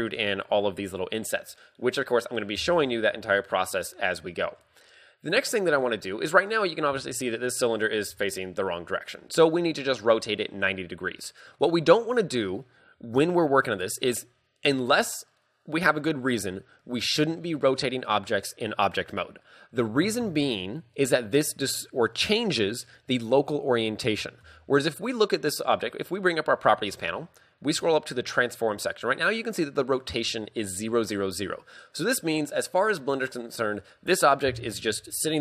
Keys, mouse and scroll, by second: 0.0 scroll up 2, 4.4 shift+middle click, 5.0 scroll down 2, 11.4 Tab, 22.5 shift+middle click, 24.5 n, 26.2 scroll up 2, 26.8 scroll up 8, 27.7 scroll up 8, 27.8 a.